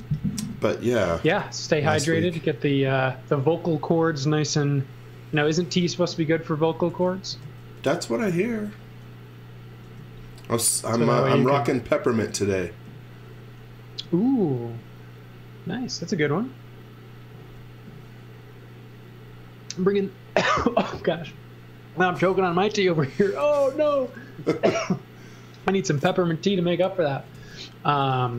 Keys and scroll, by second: 7.3 space, 9.8 m, 13.8 a, 27.4 l.